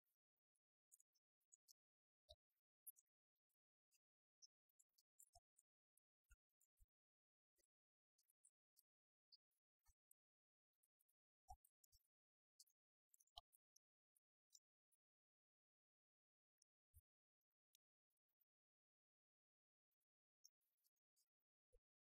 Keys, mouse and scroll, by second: 4.4-7.6 drag.